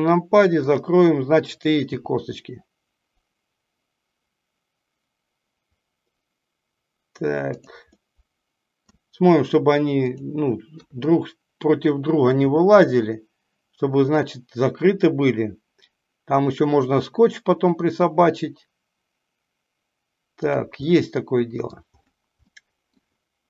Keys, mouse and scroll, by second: 0.7 click, 7.8-8.8 middle drag, 20.7-21.7 middle drag, 22.4-22.8 middle drag, 22.8 scroll down 1.